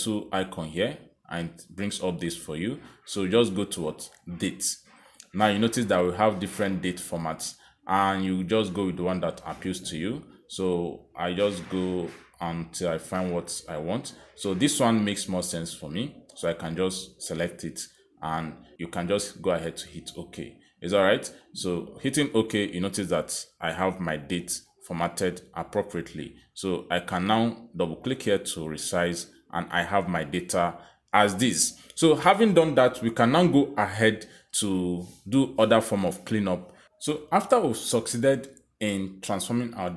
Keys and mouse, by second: 0.5 click, 5.0 click, 7.6 click, 8.3 click, 8.8 click, 9.4 click, 9.8 click, 10.2 click, 10.5 click, 10.9 click, 11.3 click, 11.7 click, 12.6 click, 14.5 click, 19.9 click, 22.6 click, 27.9 click, 28.1 click, 29.3 click, 30.0 click, 36.6 click, 37.4 click.